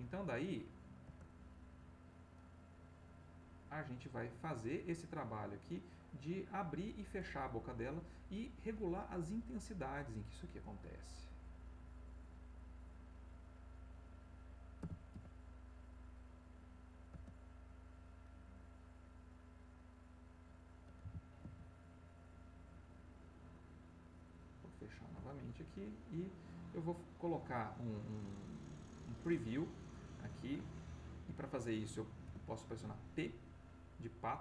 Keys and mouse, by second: 1.0 space, 2.8-4.2 drag, 5.1-6.9 drag, 10.2-13.7 drag, 14.8 r, 15.1 x, 17.1 space, 18.6-20.6 drag, 21.2 r, 21.5 x, 25.1 space, 28.6 middle click, 30.8 ctrl+middle click, 32.2 p.